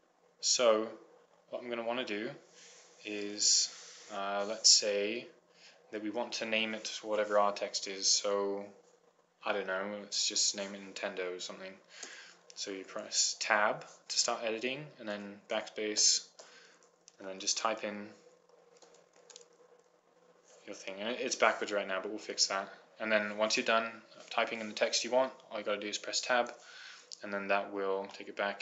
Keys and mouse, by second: 0.8-2.2 middle drag, 3.4-10.8 middle drag, 12.3 Tab, 15.4 BackSpace, 17.5 shift+n, 17.8 i, 18.0 n, 19.0-19.8 typing, 26.7 Tab.